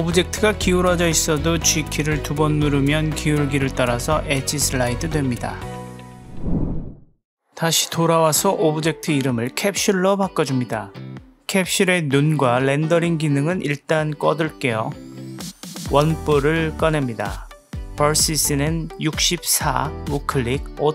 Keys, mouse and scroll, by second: 1.0 g, 8.7-9.7 drag, 10.9 click, 12.9-14.2 drag, 15.2 shift+a, 17.0 KP_Decimal, 20.0 click, 20.7-20.9 right drag.